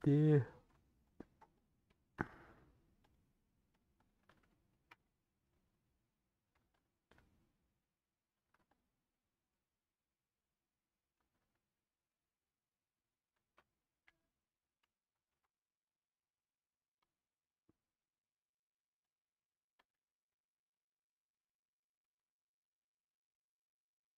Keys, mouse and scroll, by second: 0.1 middle click, 0.7 scroll up 1, 1.6 click, 1.9-3.7 shift+middle drag, 3.7 click, 4.8 /, 5.2 middle click, 5.6 Tab, 5.6 middle click, 6.6 3, 7.1 scroll down 1, 7.9 middle click, 8.4 3, 9.0-13.9 middle drag, 13.9 KP_1, 15.2 alt+z, 17.0 click, 18.1 shift+click, 19.3 shift+click, 20.4 ;, 21.3 middle click, 22.0 alt+z, 22.3 middle click, 23.2 click, 23.3 middle click.